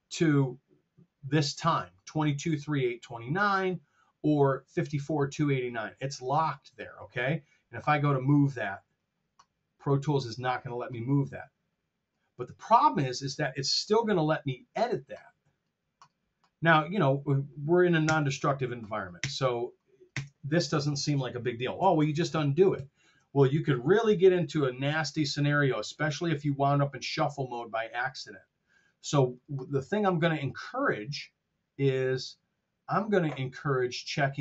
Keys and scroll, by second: 13.8 F7, 18.1 BackSpace, 19.4 BackSpace, 21.9 shift+super+z.